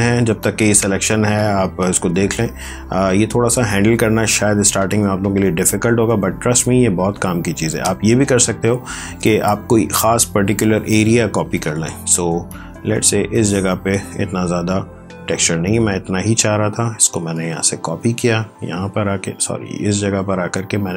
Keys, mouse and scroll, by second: 0.3 click, 2.6 ctrl+z, 3.9 ctrl+d, 7.6 ctrl+alt+z, 8.2 ctrl+z, 9.8 click, 15.5 click, 16.8 ctrl+c, 18.1 click.